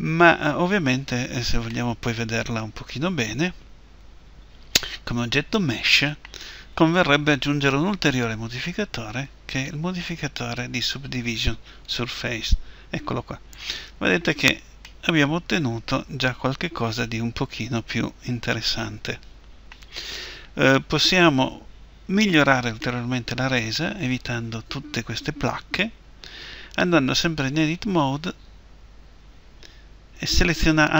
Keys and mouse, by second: 1.7-3.2 middle drag, 8.8-11.7 drag, 14.7-16.8 middle drag, 22.7-27.6 middle drag, 27.6 a, 28.0 a.